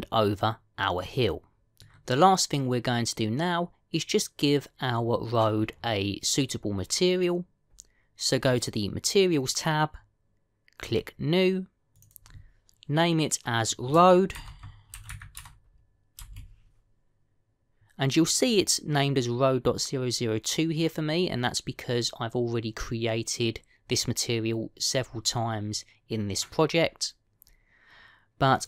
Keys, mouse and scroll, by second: 1.9 middle click, 9.3 click, 11.7 click, 12.8 click.